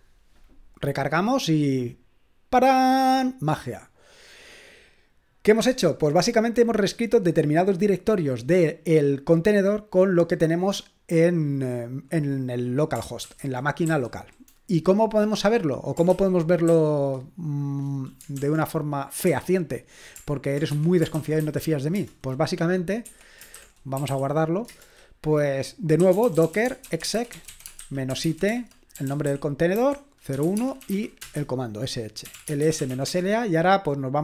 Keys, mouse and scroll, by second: 1.8-13.2 drag, 13.2-13.9 typing, 16.1-16.7 typing, 18.4 super+l, 19.2 ., 20.7 Escape, 21.1-24.6 typing, 21.9 Return, 23.0 Escape, 24.7 Return, 25.7-34.2 typing.